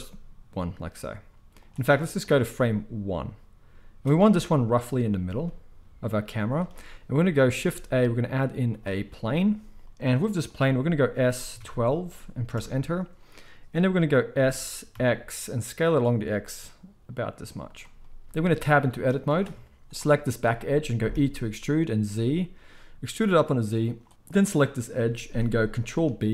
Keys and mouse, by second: 2.2-6.5 drag, 5.1 g, 6.5-17.7 shift+middle drag, 7.5 shift+a, 9.8-17.1 drag, 9.8-17.1 right drag, 11.1 s, 14.3 s, 17.7-19.2 right drag, 19.2 middle click, 19.4 right click, 19.4 Tab, 19.9 middle click, 20.4-24.1 right drag, 21.1 e, 24.3 click, 25.9 ctrl+b.